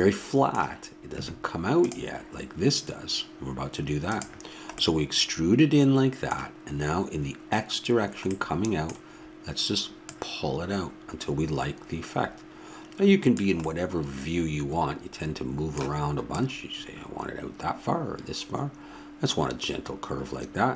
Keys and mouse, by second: 10.1-11.8 drag, 13.9-16.3 middle drag, 16.3-18.1 drag.